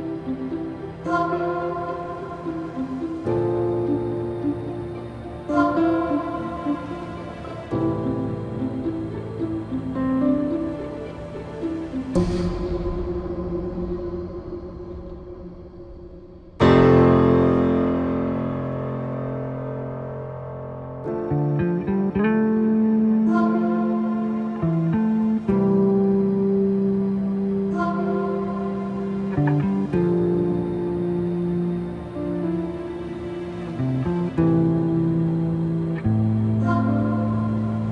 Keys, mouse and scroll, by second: 10.3-13.0 drag, 17.1-31.8 alt+drag.